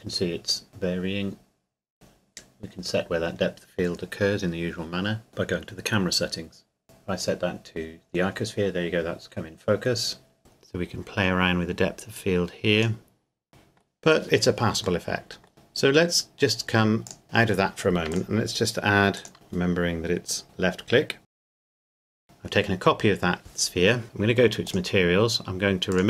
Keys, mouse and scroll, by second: 1.9 click, 5.3 click, 9.3 middle click, 10.4 click, 13.5 middle click, 14.3-15.0 scroll up 1, 15.0 middle click, 17.1 click, 17.5-18.1 scroll down 1, 18.1 click, 19.1 right click, 19.3 click, 21.2 shift+d, 21.6 g, 21.9 click, 22.0 s, 22.1 click, 23.2-24.0 scroll up 1, 24.7 click.